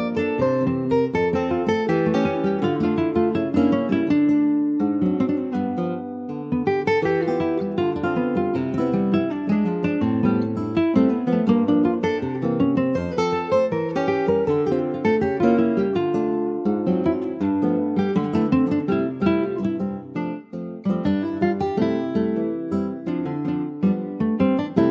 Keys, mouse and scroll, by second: 0.0 ctrl+b, 4.8 Tab, 4.9 click, 5.1-5.6 scroll down 10, 5.6 middle click, 6.3 click, 6.8 middle click, 7.0-7.4 scroll up 2, 7.4 middle click, 7.6 scroll up 1, 7.8 click, 8.0 Tab, 8.3 alt+scroll up 1, 8.5 alt+middle click, 8.8 alt+z, 9.0-9.5 alt+scroll up 2, 9.5 click, 10.1-10.7 scroll up 3, 10.7 click, 11.1 click, 11.6 Tab, 12.2 Tab, 13.2 l, 13.7-14.1 scroll down 2, 14.1 shift+middle click, 15.1-15.6 alt+scroll down 1, 15.6 alt+click, 16.5 shift+click, 17.7 shift+click, 18.4-19.5 shift+drag, 20.4 ctrl+click, 22.5-23.5 ctrl+drag, 23.5-23.9 scroll up 2, 23.9 shift+middle click, 24.1-24.9 shift+scroll up 3, 24.4 alt+z.